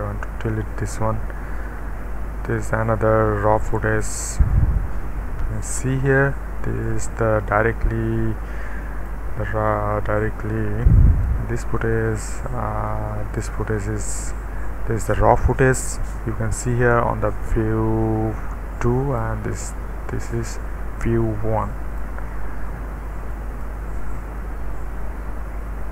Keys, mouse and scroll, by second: 1.8 Delete, 2.5 click, 3.2 Delete, 3.7-5.2 middle drag, 5.4 scroll up 1, 5.7-6.8 scroll down 1, 6.8-9.1 drag, 12.9 click, 18.8 click, 21.0-22.0 drag, 23.3 click.